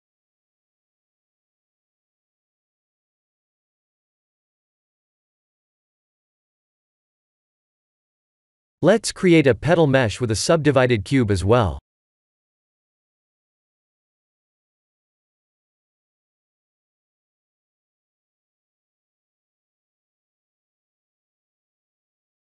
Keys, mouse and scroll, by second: 1.3 Tab, 1.8 click, 2.1 middle click, 3.5 click, 3.9 middle click, 4.2 Tab, 4.5 middle click, 5.4 click, 5.8-6.1 scroll down 2, 6.1 middle click, 6.4 middle click, 7.5 middle click, 7.6 scroll down 1, 8.5 click, 9.6 click, 10.7 shift+a, 14.6 KP_7, 15.3 KP_1, 15.8 KP_7, 17.1 KP_7, 17.8 shift+z, 19.2 click, 20.4 g.